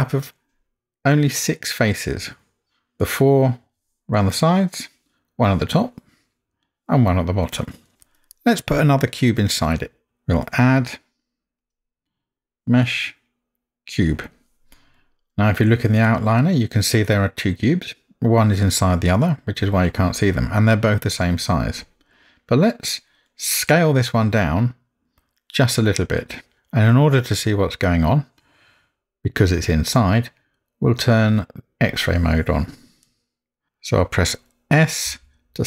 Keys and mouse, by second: 3.0-3.7 middle drag, 4.2-4.7 middle drag, 5.8-7.7 middle drag, 11.6-14.1 drag, 31.7 click, 33.1-33.7 middle drag, 35.5 s.